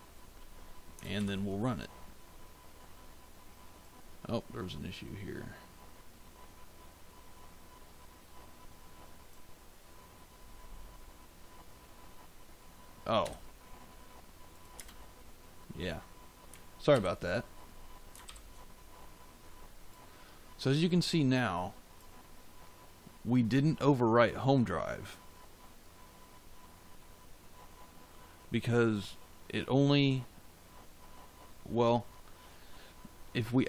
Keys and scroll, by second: 13.2 f, 14.7 space, 16.8 ctrl+s.